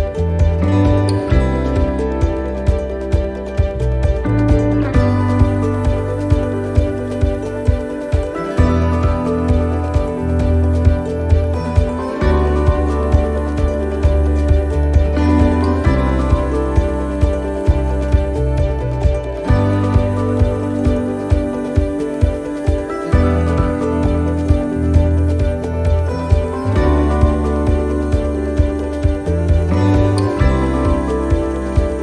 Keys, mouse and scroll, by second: 0.5 e, 2.7 middle click, 3.4 shift+middle click, 3.6 scroll up 4, 4.2 middle click, 5.5 click, 6.3 right click, 6.9 shift+right click, 8.4 shift+right click, 8.5 right click, 10.6 shift+right click, 12.0 middle click, 13.4 shift+right click, 15.1 shift+right click, 15.9-21.1 shift+right click, 21.1 middle click, 22.8 click, 24.7 middle click, 25.1-25.4 scroll down 2, 25.5 middle click, 26.2 scroll up 1, 26.8 middle click, 27.4 right click, 28.1 middle click.